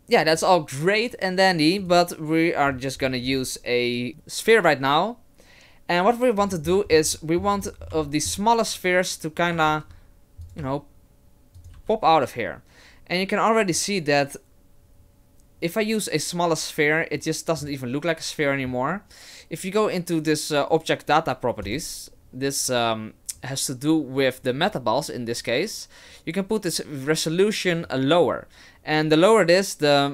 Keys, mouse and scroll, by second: 1.8 right click, 2.7-4.1 scroll up 9, 4.1-5.1 scroll up 3, 6.4-7.6 scroll down 16, 7.1 middle click, 7.6-8.4 scroll up 8, 8.0 shift+middle click, 9.7 shift+d, 10.6 s, 11.7 g, 21.6 click, 27.9 click.